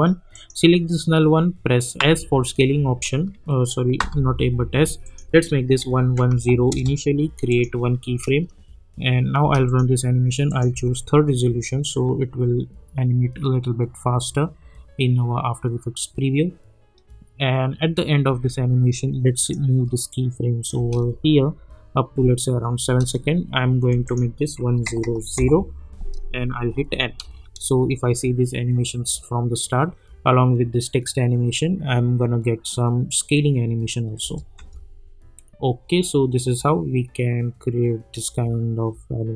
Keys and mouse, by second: 2.0 a, 4.0 s, 5.0 click, 6.7 Return, 7.5 click, 8.0 space, 9.6 click, 10.7 space, 18.2 space, 18.9-21.3 drag, 21.3 space, 23.2 space, 24.0 click, 25.3 Return, 26.7 n, 27.2 space, 34.2 space.